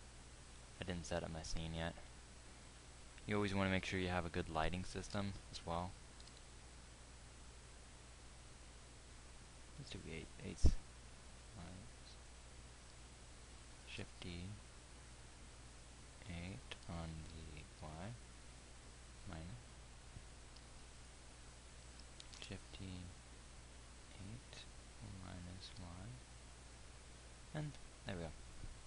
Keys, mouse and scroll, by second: 5.7 shift+d, 14.3 shift+d, 22.7 shift+d.